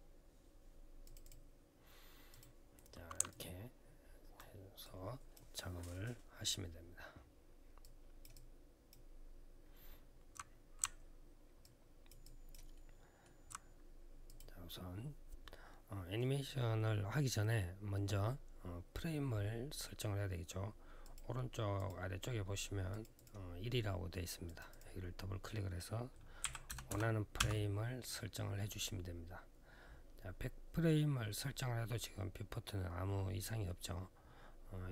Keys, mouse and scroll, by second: 0.8 click, 1.0 click, 1.1 double click, 2.1 double click, 3.1 alt+click, 4.6 alt+click, 5.3 alt+scroll up 1, 7.6 alt+click, 8.1 alt+click, 9.2-9.5 alt+scroll up 1, 11.4 alt+click, 12.0 alt+click, 12.5 alt+middle click, 14.0 click, 20.8 click, 21.5 click, 22.7 click, 22.9 click, 24.2 click, 24.5 click, 26.4-27.2 typing.